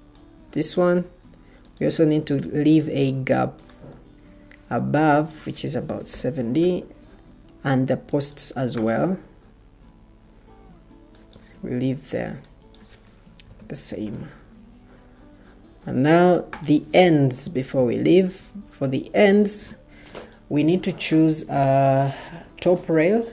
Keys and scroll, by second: 5.6-6.5 typing, 13.3 typing.